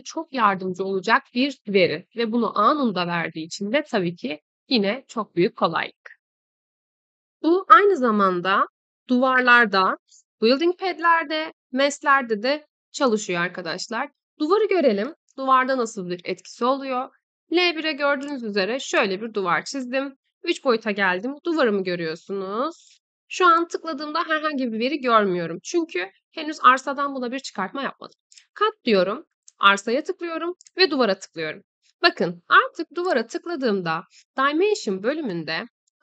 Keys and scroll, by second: 19.4 Escape, 35.1 Escape.